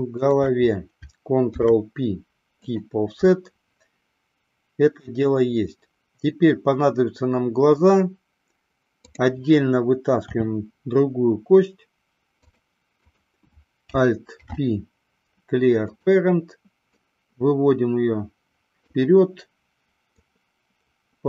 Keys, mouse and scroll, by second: 0.5 shift+click, 1.7 ctrl+p, 10.7 e, 13.2 click, 14.6 alt+p, 17.3-19.1 drag, 20.6-21.2 drag.